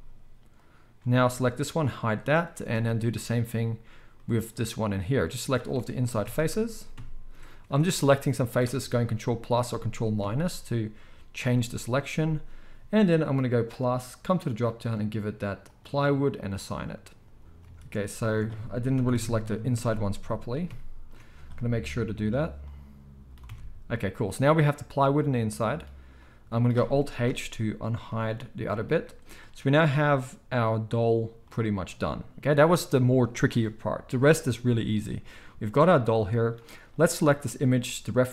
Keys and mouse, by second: 0.6-13.5 middle drag, 1.8 h, 2.6 Tab, 6.0 ctrl+KP_Add, 9.2 ctrl+KP_Subtract, 13.5-18.2 drag, 17.4 Tab, 17.6 alt+a, 18.2-22.2 alt+shift+middle drag, 18.9 ctrl+KP_Add, 22.2-28.8 drag, 23.4 Tab, 27.2 alt+h, 28.1 alt+a, 28.8-29.2 middle drag, 29.2 click, 29.3-38.3 middle drag, 34.9 g.